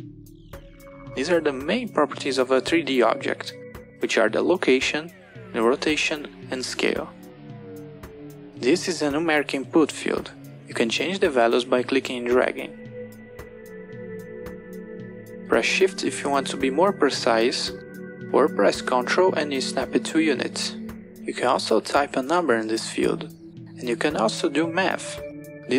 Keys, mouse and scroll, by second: 0.1-3.1 drag, 12.8-17.5 drag, 19.0 click, 22.0 click, 24.7-25.7 drag.